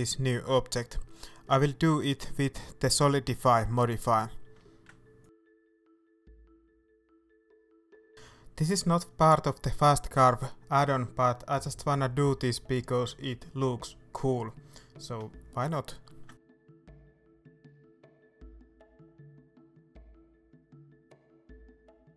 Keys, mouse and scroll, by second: 0.1-1.6 scroll up 2, 1.6-2.0 scroll up 1, 2.0 click, 2.8 scroll up 1, 4.5-10.7 drag, 10.7-13.7 shift+middle drag, 11.3-11.6 scroll up 2, 11.9-13.7 scroll up 4, 13.7-15.7 drag, 15.5 scroll down 2, 15.7-20.4 middle drag, 17.6 scroll up 2, 18.5-20.4 scroll up 4, 20.4-22.1 drag.